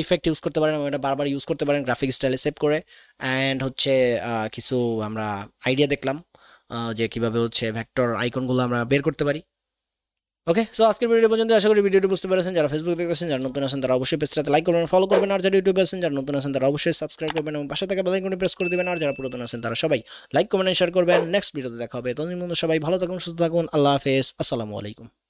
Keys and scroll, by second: 12.9 ctrl+s, 15.3 ctrl+s.